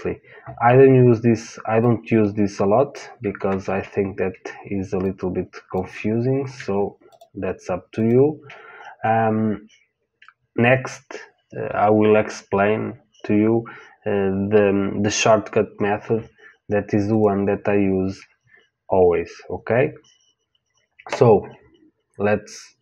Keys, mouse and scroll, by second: 1.7 click, 3.6 ctrl+z, 5.0 click, 6.3 ctrl+z, 7.0 click, 17.1-20.8 drag.